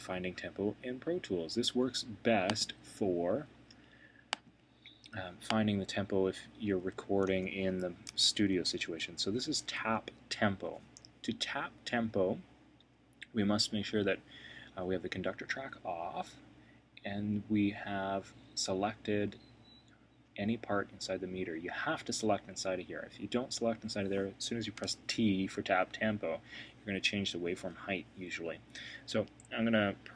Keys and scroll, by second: 7.3 Return, 8.2 super+[.